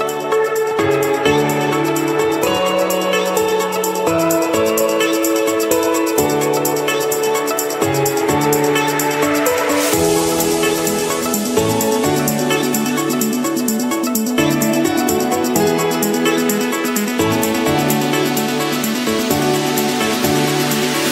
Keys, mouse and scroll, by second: 0.0 middle click, 0.0 middle click, 0.1-21.1 middle click, 1.7-2.9 drag, 5.5-6.6 drag, 8.8 click, 11.0 click, 11.2 scroll, 11.3-11.7 scroll down 5, 11.7-12.4 scroll up 7, 12.7 Escape, 16.4-17.2 typing, 18.4 Return, 19.6 click, 20.2 click, 21.0 click.